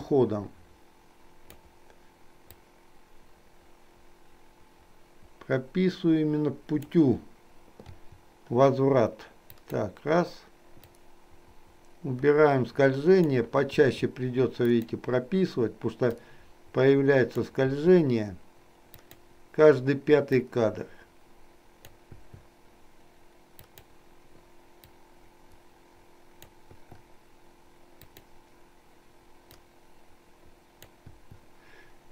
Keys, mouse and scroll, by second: 2.7-7.2 drag, 8.0 i, 9.7 click, 11.2-13.5 drag, 13.8 i, 14.7 click, 16.2-17.6 drag, 17.8 i, 19.1 click, 20.6-22.1 drag, 23.7 click, 25.0 click, 25.3-26.7 drag, 28.1 click, 29.7-31.1 drag, 31.2 i.